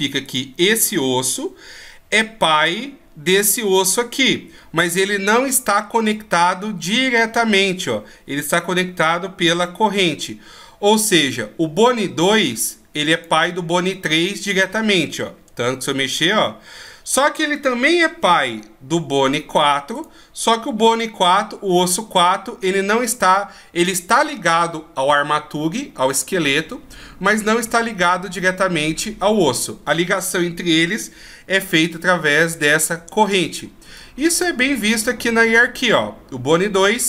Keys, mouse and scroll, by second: 0.2 right click, 13.1 right click, 15.5 g, 17.6 right click, 19.9 right click, 20.7 g, 34.0 click.